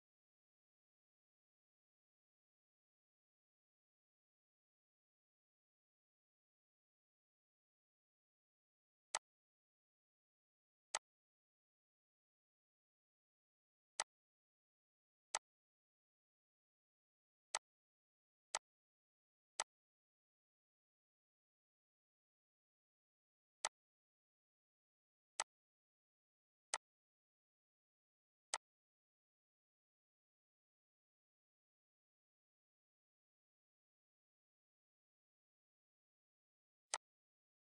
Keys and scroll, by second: 0.7 Delete, 1.8 Delete, 2.3 ctrl+s, 28.4 ctrl+d, 36.0 ctrl+z.